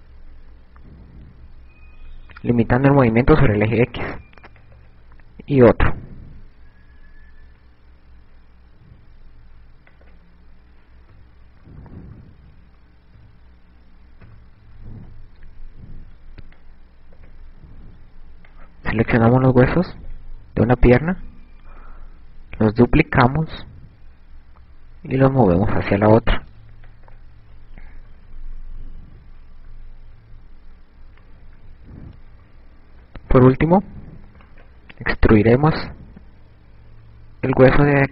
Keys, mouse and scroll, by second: 4.6 click, 5.8 e, 10.2 click, 11.6 KP_4, 12.1 KP_4, 12.3-12.8 KP_4, 12.8 KP_7, 15.0 KP_1, 15.5 KP_3, 16.9 b, 17.5 click, 21.9 shift+d, 27.7 click, 28.7-33.1 typing, 35.1 right click, 35.5 e.